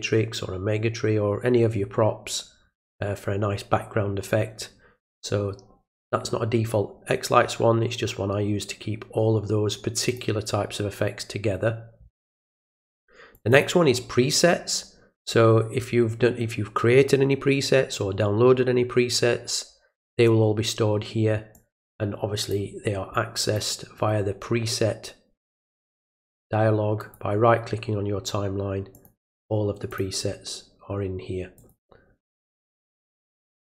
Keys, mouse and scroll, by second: 10.1 click, 13.3 click, 13.5 click, 21.5 click, 23.4 click, 24.0 right click, 27.0 click, 28.9 click, 29.9 click, 31.6 click, 33.2 click.